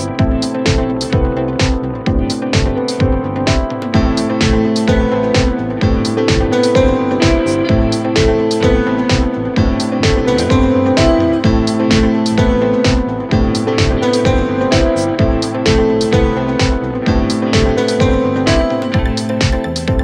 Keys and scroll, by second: 19.0 F3.